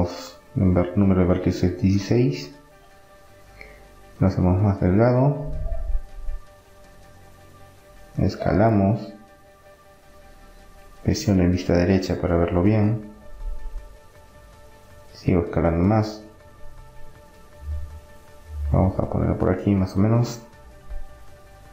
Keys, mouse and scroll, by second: 4.3 s, 6.8 KP_3, 8.2 KP_5, 9.5-11.3 drag, 11.3 s, 12.5-14.5 middle drag, 15.1 s, 18.1-21.3 drag, 20.8 middle click.